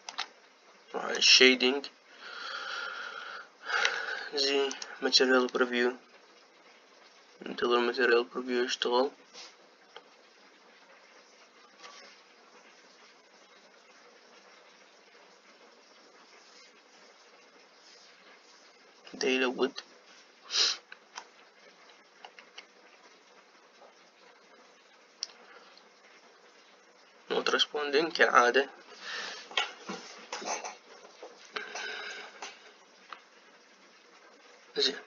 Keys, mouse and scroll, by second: 0.6-2.0 shift+middle drag, 2.0 click, 6.4 z.